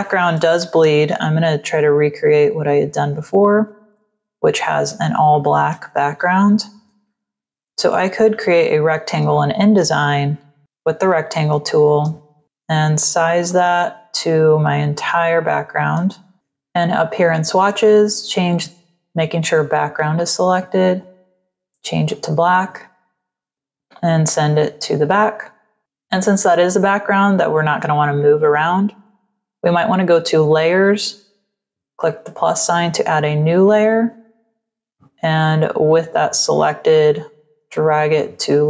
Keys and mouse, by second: 0.5 ctrl+-, 1.7 click, 2.3 click, 5.5 click, 6.1 ctrl+0, 7.9 click, 9.2 space, 9.2 click, 11.5 space, 11.6 click, 13.4 click, 15.0 space, 15.3 click, 16.6 click, 20.5 click, 22.0 click, 23.2 click, 25.1 click, 28.8 click, 32.0 click, 34.8 click, 37.4 click.